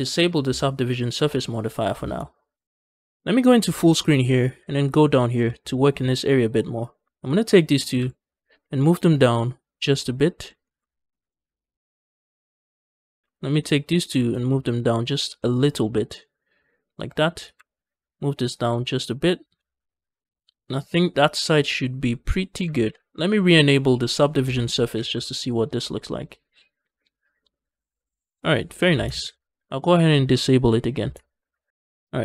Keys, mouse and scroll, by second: 1.2 click, 2.7 ctrl+space, 3.2 middle click, 3.7 shift+middle click, 4.1 middle click, 4.3 scroll up 1, 4.6 shift+middle click, 4.8 Tab, 5.0 middle click, 5.4 shift+middle click, 5.6 scroll up 1, 5.9 middle click, 6.6 click, 7.1 shift+click, 7.4 middle click, 7.8 g, 8.1 z, 9.5 shift+click, 9.8 middle click, 10.5 shift+middle click, 10.7 scroll up 1, 11.0 middle click, 11.7 ctrl+z, 11.8 middle click, 12.2 shift+middle click, 12.5 middle click, 13.2 shift+click, 13.5 middle click, 13.9 g, 14.2 z, 14.9 shift+click, 15.2 middle click, 15.8-17.2 shift+middle drag, 17.2 click, 17.4 g, 17.6 z, 18.4 shift+click, 18.7 middle click, 19.4 Tab, 19.6 scroll down 1, 19.8-22.4 middle drag, 22.8 ctrl+space, 24.0 click, 24.8 ctrl+space, 25.1-28.8 middle drag, 29.1 ctrl+space, 30.5 click, 31.2 ctrl+space, 31.6 scroll down 1.